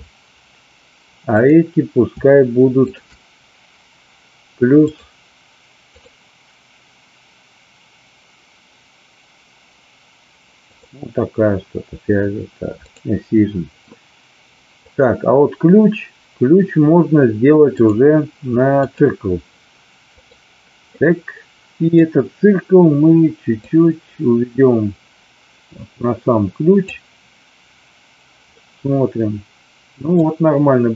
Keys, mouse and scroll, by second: 2.8 shift+click, 6.0-10.8 drag, 17.8-18.9 drag, 20.2 click, 21.1 middle click, 23.6-26.8 drag, 28.7-30.2 middle drag.